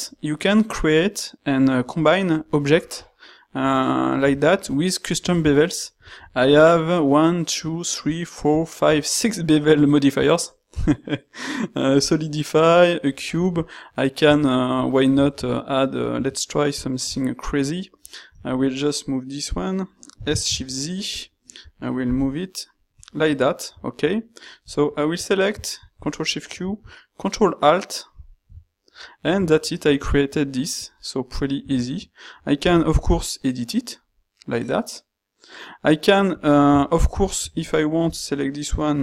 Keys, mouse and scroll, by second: 3.9 middle click, 4.3-5.9 ctrl+middle drag, 6.1 shift+middle click, 14.2 q, 20.2 s, 22.2 g, 25.8 ctrl+shift+q, 32.8 ctrl+g.